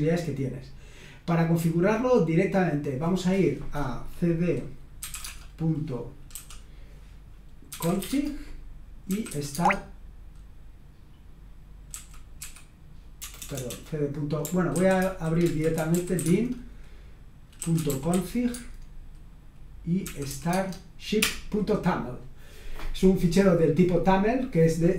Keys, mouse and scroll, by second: 3.1 click, 4.7-6.3 typing, 7.4-9.5 typing, 11.9-13.6 typing, 14.8 ctrl+w, 15.2 ctrl+w, 15.5-18.6 typing, 20.0-20.3 typing, 20.5 Tab, 21.2 Return.